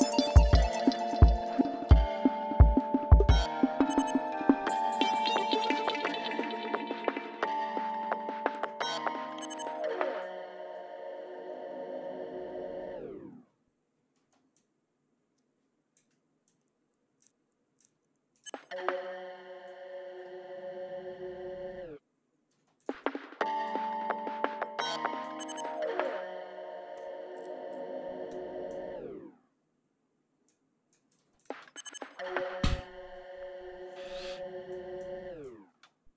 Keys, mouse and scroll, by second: 0.3 ctrl+scroll down 2, 0.7 ctrl+scroll up 2, 2.5 ctrl+scroll down 2, 3.1 ctrl+scroll up 2, 6.7 click, 8.7 ctrl+scroll down 2, 9.1-9.8 ctrl+scroll up 3, 11.0-12.5 scroll down 6, 12.6 scroll up 2, 13.9 ctrl+scroll up 2, 14.6 ctrl+space, 18.3 space, 20.4 ctrl+scroll down 2, 22.3 space, 22.5 click, 23.4-25.2 drag, 25.8 click, 28.0 click, 30.3 click, 31.1 space, 31.6 scroll down 1, 32.7 ctrl+scroll up 1, 33.3 ctrl+d, 34.5 click, 35.6 space.